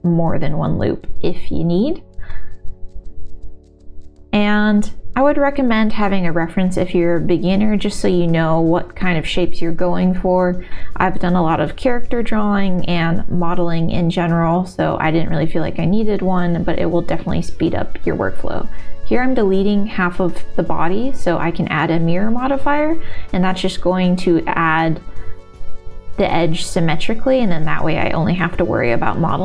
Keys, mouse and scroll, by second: 0.5 middle click, 0.7 KP_1, 1.5 s, 1.9 e, 2.3 shift+middle click, 3.1 s, 3.4 shift+middle click, 3.7 e, 4.8 s, 5.3 e, 7.6 e, 8.4 s, 9.0 middle click, 10.0 shift+middle click, 10.5 x, 10.9 alt+3, 11.7 alt+shift+click, 12.8 s, 15.7 alt+2, 15.9 alt+3, 16.2 alt+shift+click, 17.2 x, 19.6 alt+click, 20.1 alt+shift+click, 20.8 s, 21.8 x, 25.2-26.8 drag, 26.5 r, 26.8 2, 27.6 e, 28.8 g.